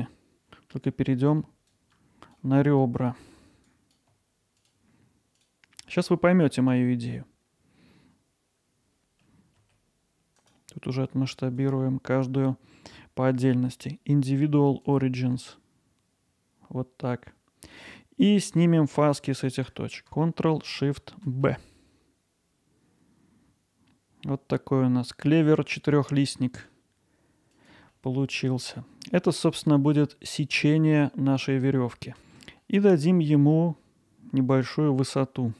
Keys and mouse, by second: 1.8 click, 3.8 click, 4.6 shift+click, 6.7 shift+click, 10.4 right click, 11.6-15.0 drag, 17.8-20.1 drag, 27.5 click, 27.9 middle click, 32.2 ctrl+alt+middle drag, 32.6-33.5 alt+middle drag.